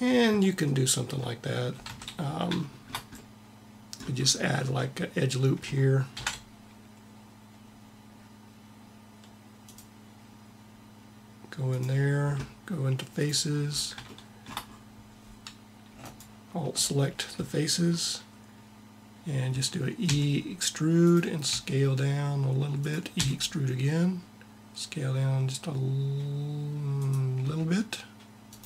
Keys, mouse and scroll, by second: 1.6 Tab, 5.8 ctrl+r, 12.9-14.5 drag, 16.1-17.7 middle drag, 19.8 e, 20.8-24.2 drag, 21.1 s, 22.9 e, 27.1 s.